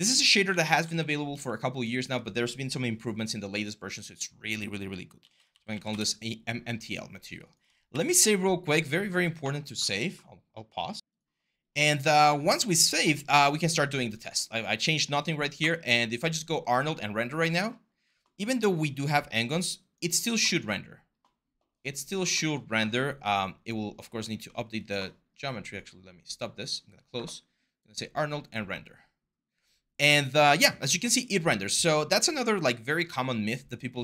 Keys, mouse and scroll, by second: 0.0-2.4 typing, 3.7-4.5 typing, 5.7 Return, 7.2 typing, 7.7 ctrl+s, 11.0 typing.